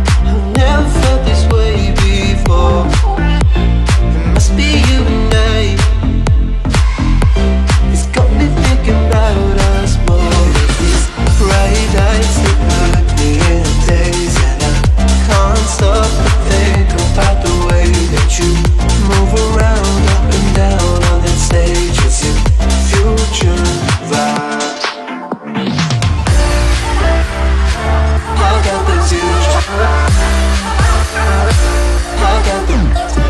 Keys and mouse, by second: 1.4-4.1 typing, 1.5 ctrl+=, 2.6 click, 3.4 ctrl+-, 3.7 click, 5.2 click, 6.6-9.9 alt+drag, 11.1 ctrl+=, 11.5-12.1 space, 13.1-13.6 click, 13.7 ctrl+z, 14.2-14.7 click, 15.2 right click, 16.6 click, 16.9 ctrl+-, 18.4 click, 18.7 right click, 19.3 click, 21.1 ctrl+=, 21.4 space, 22.6 Down, 23.6 Right, 25.2-25.7 drag, 28.7-29.6 drag, 30.0 Right, 31.1-32.2 click, 32.4 right click.